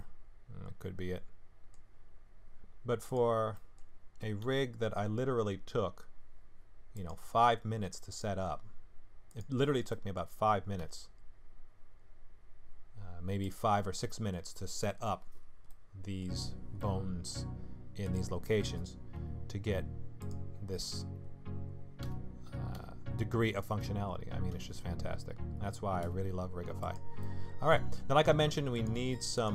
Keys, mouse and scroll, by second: 0.0 middle click, 1.9-2.3 scroll down 3, 3.2 click, 3.5 middle click, 4.4 g, 8.1 click, 9.3 click, 9.6-9.9 scroll down 2, 9.9 middle click, 10.8 s, 13.9 middle click, 14.7 middle click, 15.7 middle click, 16.8 middle click, 18.0 click, 19.1 g, 22.0 r, 27.2 middle click, 28.7 click, 29.3 click.